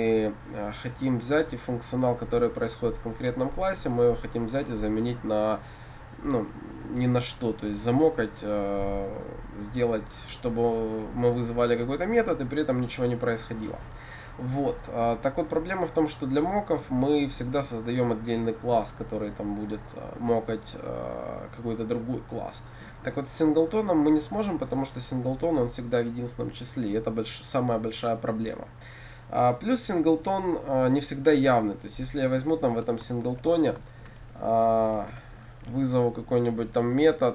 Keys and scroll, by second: 33.3 ctrl+v, 34.1 ctrl+c, 35.1 ctrl+v.